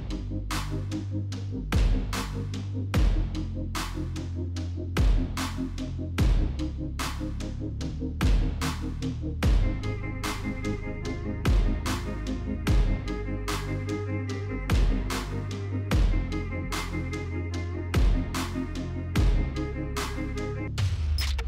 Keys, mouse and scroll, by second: 0.2 space, 0.4 space, 1.5 space, 1.8 space, 2.6 space, 5.6 click, 5.7-8.0 typing, 9.2 click, 9.4 click, 12.2 click, 12.9-19.1 typing, 14.0 click, 14.8 click.